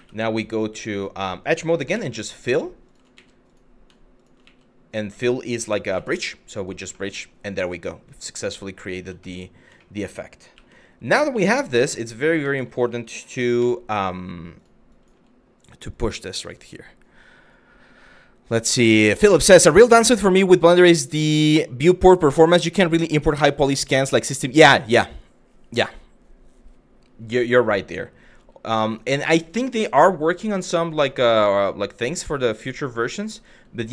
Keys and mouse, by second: 1.6 f, 2.0 click, 2.5 shift+click, 2.8 f, 3.1 click, 6.6 middle click, 9.5 shift+middle click, 10.2 1, 10.8 click, 10.9 f, 12.0 ctrl+z, 13.2 g, 14.2 click, 14.6 click, 15.5 click, 27.3 click, 28.0 g, 28.5 click, 29.1 g, 29.9 click, 30.3 click, 30.6 g, 31.6 click, 32.1 click, 32.8 click, 33.6 click.